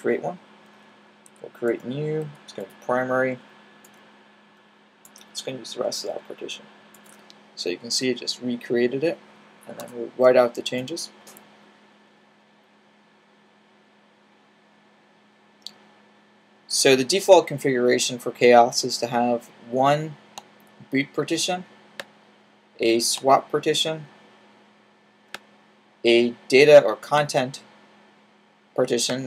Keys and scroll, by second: 1.2 n, 6.0 p, 9.7 w.